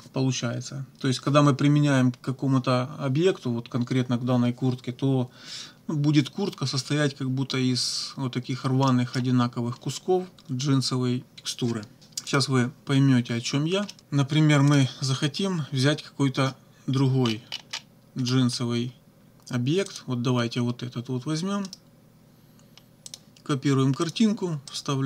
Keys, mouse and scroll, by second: 8.9 click, 12.3 click, 13.9 click, 14.7 click, 17.2-17.9 scroll down 2, 18.2 scroll up 2, 19.9 click, 21.7 right click, 23.1 click, 24.1 click, 24.7 right click.